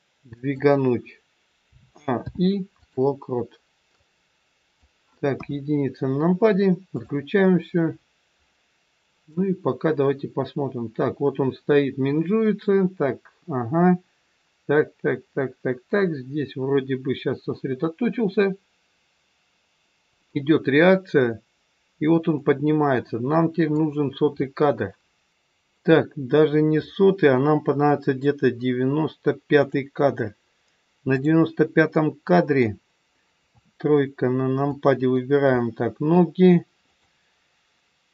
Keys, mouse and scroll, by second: 1.6 a, 2.1 i, 3.9 click, 5.2 KP_1, 5.7 scroll down 4, 6.9 click, 7.6 scroll down 1, 8.3-8.9 scroll down 6, 9.4 click, 25.3 scroll up 2, 29.6 click, 29.6 scroll up 6, 31.1 click, 31.9 middle click, 33.5 KP_3, 34.7 click, 35.6 middle click, 36.8 click.